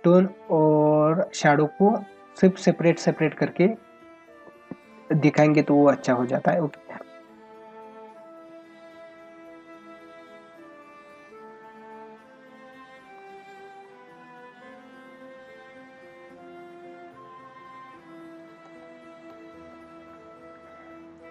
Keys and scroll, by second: 18.6 space.